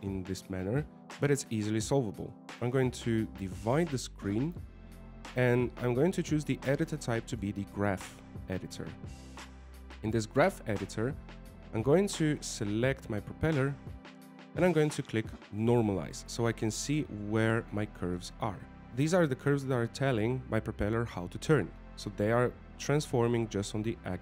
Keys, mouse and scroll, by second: 4.2 click, 7.0 click, 11.9-12.3 scroll up 7, 12.6 scroll down 3, 17.4 click, 18.6 scroll down 3, 18.9 right click.